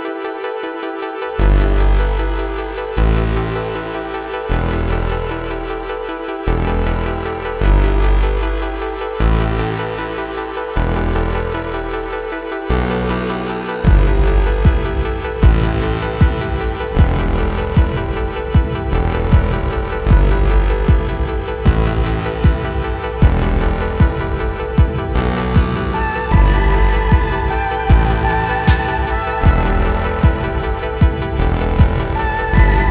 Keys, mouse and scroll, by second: 0.2 click, 1.5 click, 2.7 click, 3.6-4.7 drag, 5.2 click, 6.1-6.5 scroll down 2, 6.7 alt+middle click, 8.2-11.4 drag, 11.7-17.5 drag, 18.5-23.7 drag, 25.2-30.2 drag, 30.5 alt+middle click, 30.6-31.0 scroll down 2, 31.5 scroll down 1, 32.6-32.9 drag.